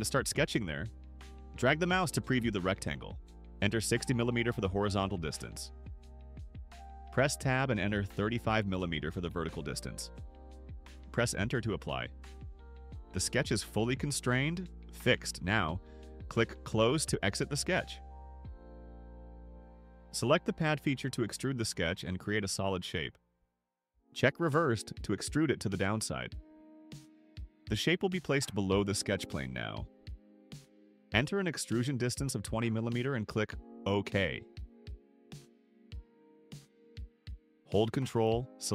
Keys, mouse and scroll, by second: 1.1 click, 5.3 6, 6.0 0, 7.9 Tab, 9.9 3, 10.5 5, 11.9 Return, 18.8 click, 22.2 click, 25.5 click, 28.2 click, 29.4 2, 29.9 0, 30.8 click, 33.3 click, 36.1 right click, 38.1 click.